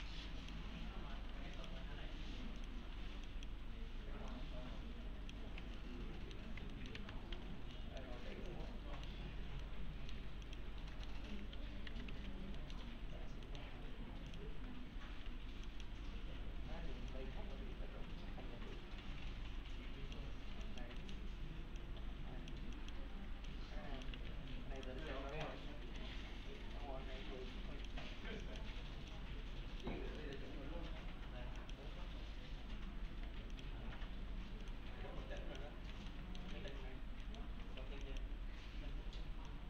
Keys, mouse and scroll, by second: 1.0 scroll down 1, 1.2 1, 1.6 click, 2.9 1, 3.3 click, 5.8-6.4 alt+middle click, 6.7-7.9 typing, 6.7 alt+middle click, 7.8 middle click, 8.5-9.1 alt+middle click, 9.6-10.2 alt+middle click, 10.5 click, 10.9 middle click, 11.7-12.6 typing, 12.6 middle click, 13.1-13.5 scroll down 1, 13.5 middle click, 13.7-14.3 scroll up 1, 14.3 click, 14.9 scroll up 1, 15.3 1, 15.7 click, 16.2-17.1 scroll up 1, 17.1-20.2 click, 21.8-22.7 click, 24.2 alt+1, 24.8 click, 25.0 right click, 25.3 click, 30.2 middle click, 30.5-31.6 scroll down 1, 31.9-33.2 scroll up 1, 33.2 1, 33.5 click, 34.9 1, 35.4 click, 36.1 alt+middle click, 38.1 ctrl+click.